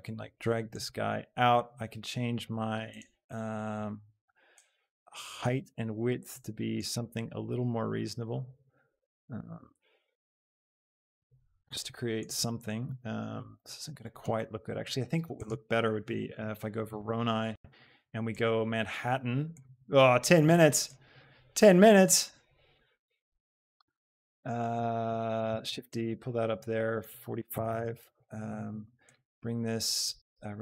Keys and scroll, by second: 15.3 a, 16.0 v, 16.4 r, 16.7 Return, 25.6 shift+d, 27.8 Return.